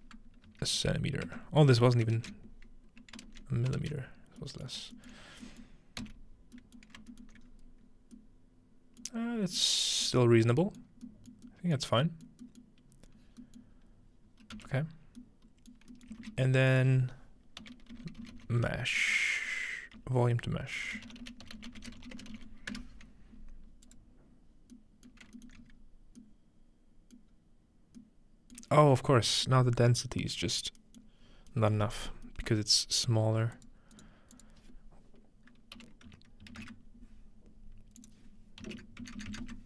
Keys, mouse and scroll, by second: 4.8-6.6 ctrl+shift+middle drag, 6.8 middle click, 7.3-8.4 alt+middle drag, 7.5-9.3 scroll up 2, 9.3 scroll down 1, 9.6 middle click, 10.3 middle click, 10.3 scroll down 1, 10.8 middle click, 11.3 middle click, 12.4-13.4 middle drag, 12.9-14.3 scroll up 2, 13.8-15.0 middle drag, 14.3-15.2 scroll down 3, 14.6 m, 16.2 typing, 16.7 shift+click, 17.6-22.8 typing, 23.9 click, 24.8-25.3 middle drag, 25.4 alt+middle click, 25.6 scroll up 1, 25.7-26.4 alt+middle drag, 27.2 middle click, 27.4 scroll up 1, 28.7 middle click, 28.9-30.0 scroll down 1, 30.0-33.4 scroll up 3, 33.4 scroll up 1, 33.6 click, 34.4 click, 35.8-36.5 typing.